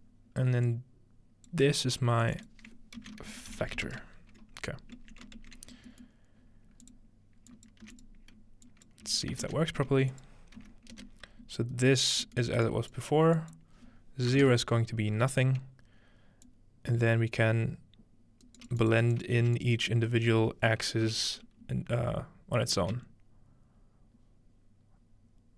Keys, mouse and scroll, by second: 0.7-1.7 drag, 2.3 click, 3.0-4.4 typing, 6.1 middle click, 6.4-7.0 scroll down 1, 6.9-7.5 drag, 7.7 click, 7.9 1, 8.1 click, 8.9 click, 9.1 1, 9.4-11.7 ctrl+drag, 9.6 ctrl+space, 10.6 x, 11.9 middle click, 12.4 middle click, 12.7-15.0 drag, 16.4-18.7 drag, 18.5 right click, 18.9 click, 19.2 click, 19.4 1, 19.6 click, 20.1 click.